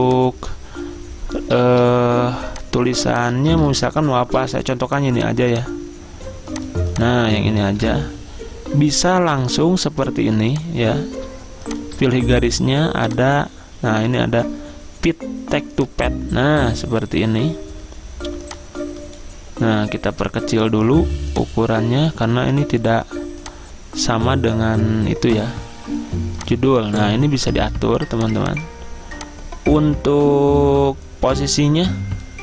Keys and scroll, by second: 3.7 ctrl+a, 4.5 ctrl+c, 7.8 ctrl+v.